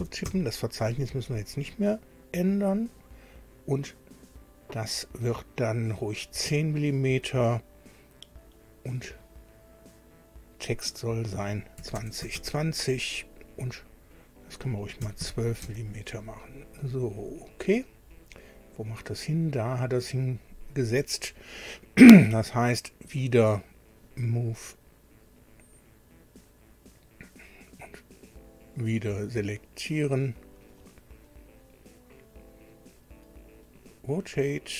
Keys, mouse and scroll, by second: 0.0-0.7 typing, 1.5 click, 2.7 click, 10.8 click, 11.7 KP_2, 12.0 KP_0, 12.2 KP_2, 12.3 KP_0, 14.1 click, 15.0 KP_1, 15.2 KP_2, 15.6 Tab, 17.2 click, 18.1-18.5 scroll down 1, 19.1 scroll up 1, 23.9 click, 25.3 click, 26.9 click, 28.3 click, 30.5-31.0 scroll up 1, 31.3 scroll down 1, 33.7 click.